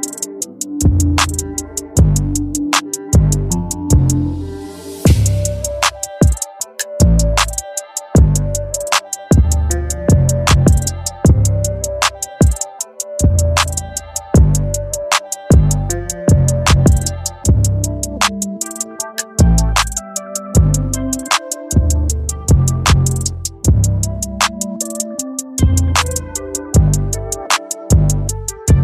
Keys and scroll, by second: 7.7 ctrl+d, 12.1 ctrl+t, 21.5 Return.